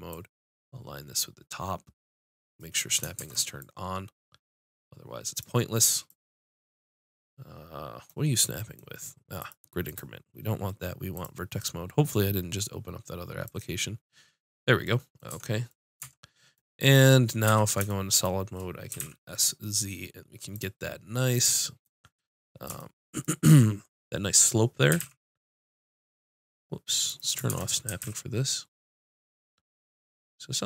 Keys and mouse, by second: 0.1-2.6 drag, 3.2 shift+Tab, 3.7-5.5 drag, 6.1-8.4 drag, 9.9-11.8 drag, 13.8-15.3 drag, 15.3 Tab, 16.0 Tab, 17.5 z, 18.9 s, 25.0 s, 27.5 shift+Tab, 27.9 s.